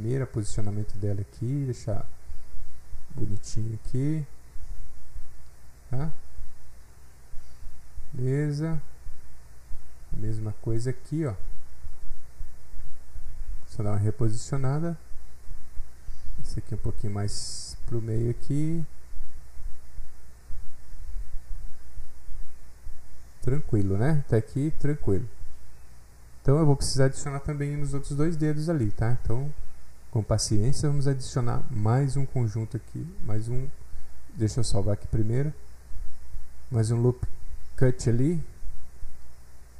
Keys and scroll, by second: 36.2 alt+Right, 36.5 Left, 36.5 Left, 36.9 Left, 37.0 Left, 37.1 Left, 37.5 Delete, 38.3 7, 39.0 Return.